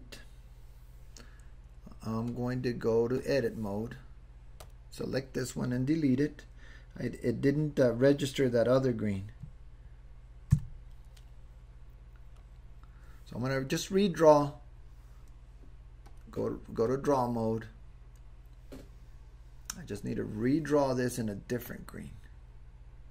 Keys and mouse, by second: 2.3-3.3 drag, 4.6 click, 10.5 Delete, 12.6 Delete, 16.1-17.0 drag, 20.0 drag.